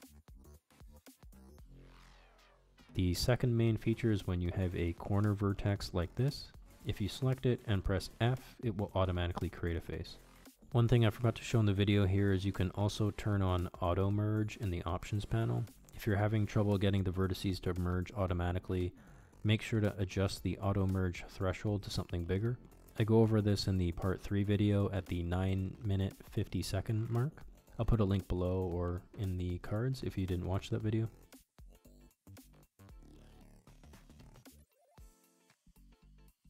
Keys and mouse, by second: 1.1 click, 12.6 shift+middle click, 13.2 f, 15.5 middle click, 16.5 f, 18.0 middle click, 19.4 g, 20.8-22.8 middle drag, 27.3 KP_1, 27.3 KP_2, 28.2 KP_1, 31.6-33.8 middle drag, 36.2 click.